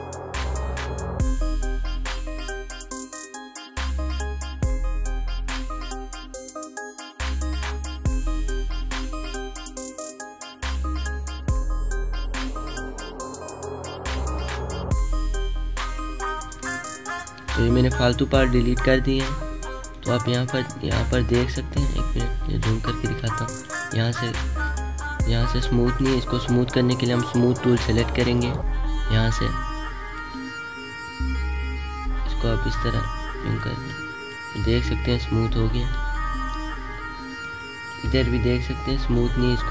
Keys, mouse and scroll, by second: 0.1 alt+click, 2.1-6.2 alt+drag, 6.2 space, 6.3 click, 6.4 space, 6.8 alt+click, 7.0 alt+scroll down 1, 7.7 space, 7.7 click, 8.5 alt+scroll up 1, 9.1 click, 9.8-11.0 alt+drag, 11.0 space, 11.0 click, 11.3 space, 11.9 alt+scroll down 1, 12.1 space, 12.2 click, 12.4 space, 13.0 click, 14.1 alt+scroll up 1, 14.3 space, 14.4 click, 14.7 alt+scroll down 1, 15.0 click, 15.7 alt+scroll up 1, 16.0 space, 16.1 click, 16.3 space, 16.7 alt+scroll down 1, 17.4 space, 17.4 click, 17.9 space, 19.8 click, 20.3 alt+scroll up 1, 20.9 alt+scroll up 1, 21.7 space, 21.7 click, 22.7 alt+scroll up 1, 23.2 space, 23.4 click, 35.6 alt+scroll down 2, 35.9 space, 36.0 click, 36.4 space, 37.0-37.4 alt+scroll up 2, 37.4 space, 37.5 click, 38.3 alt+scroll up 1.